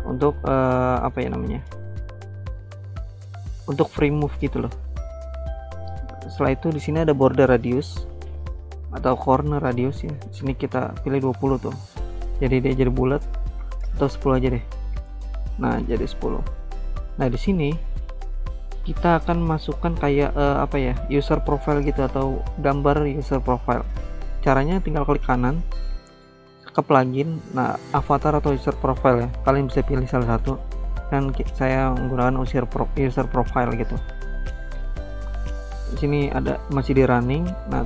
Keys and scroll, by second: 10.0-10.9 typing, 13.4-13.8 typing, 14.1 Return.